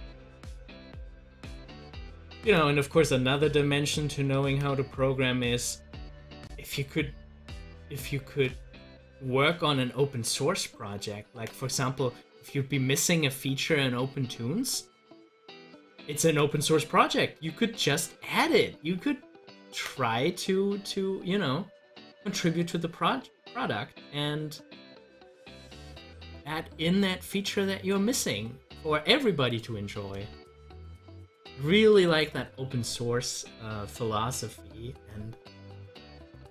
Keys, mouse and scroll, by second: 8.6 z, 9.3 click, 9.6-16.2 drag, 16.2 ctrl+z, 25.2 click, 25.9 scroll up 1, 31.5 Delete, 32.0 click, 36.3-36.5 drag.